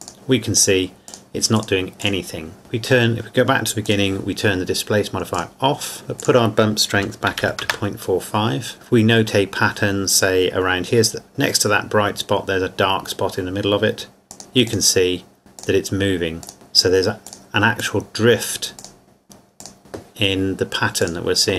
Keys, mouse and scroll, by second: 3.9 click, 6.2 click, 7.0 KP_Decimal, 7.3 KP_4, 7.4 KP_5, 7.7 KP_Enter, 14.4 click.